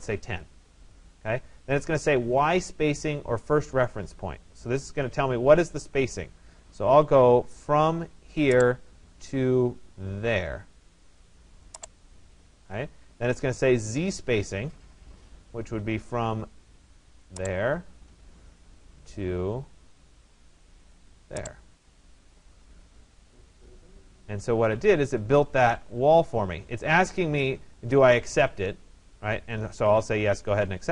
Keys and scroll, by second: 0.1 0, 0.6 Return, 2.9 Return, 29.3 Return.